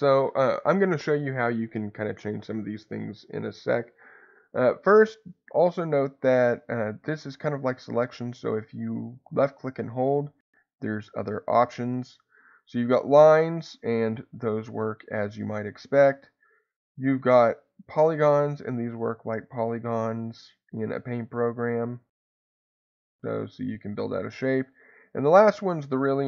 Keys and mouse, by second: 9.4-12.3 drag, 13.3-14.3 drag, 14.9 click, 16.4-18.0 drag, 19.0 click.